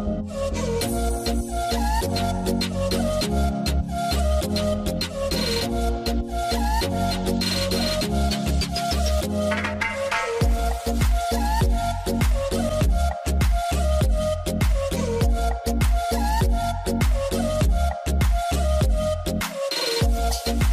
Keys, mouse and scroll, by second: 0.1 scroll down 1, 1.0-2.8 typing, 1.0 middle click, 1.7 scroll down 1, 1.9-2.6 scroll up 1, 2.6 middle click, 5.7-6.1 scroll up 1, 8.7 ctrl+s.